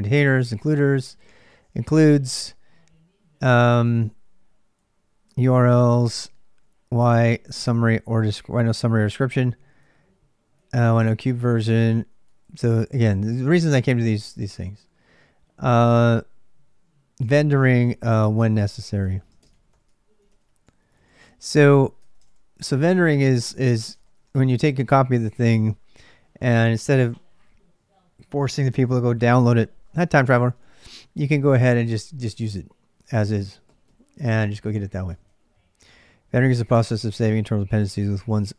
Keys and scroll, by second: 1.7 j, 4.5 j, 4.7 j, 4.9 j, 6.8 k, 7.0 k, 8.0 j, 8.4 j, 10.8 j, 11.5 j, 12.5 j, 12.8 j, 14.0 k, 14.2 k, 16.8-26.5 typing, 29.9 ctrl+[, 29.9-31.6 typing, 35.0-37.8 typing.